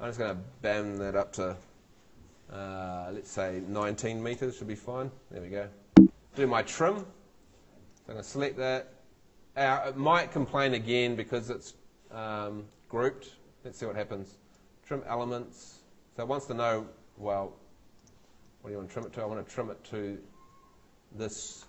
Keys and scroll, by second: 3.6-4.5 typing, 5.9 Escape, 20.5 Escape.